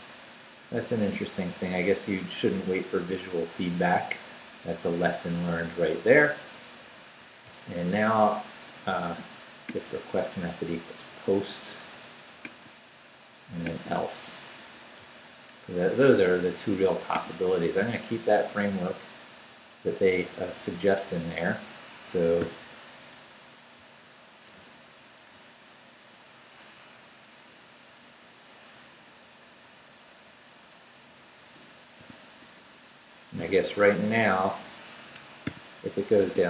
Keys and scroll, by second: 18.6 Up, 20.2 Left, 20.9 Left, 21.9 Escape, 22.4 p, 24.4 super+v, 26.6 Escape, 28.7 Left, 29.3 Left, 32.0 i, 32.2 Tab, 33.4 i, 35.1 Escape, 35.4 o, 36.2 Tab.